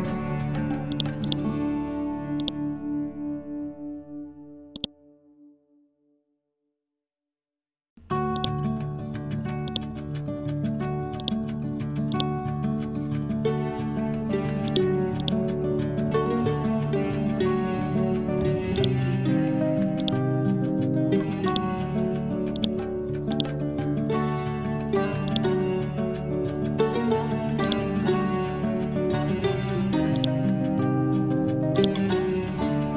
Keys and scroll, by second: 10.1 c, 12.5 Up, 32.6 Escape.